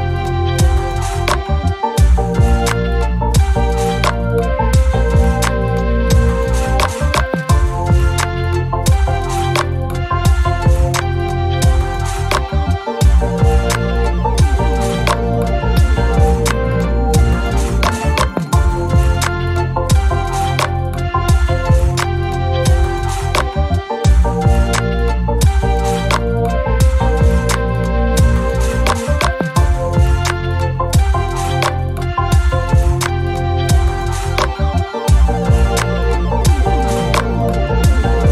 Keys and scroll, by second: 1.3 shift+F6, 2.9 ctrl++, 2.9 ctrl++, 8.1 F1, 12.2 Page_Down, 12.5 Page_Up, 13.2 Page_Down, 15.1 ctrl+d, 17.8 F1, 18.6 Page_Up, 19.3 Page_Down, 20.9 Page_Down, 23.4 F1, 23.8-24.9 typing, 26.6 shift+F6, 30.4 F1, 31.0 Page_Down, 32.6 shift+F6, 36.0 F1, 36.5 Page_Down, 37.8 space.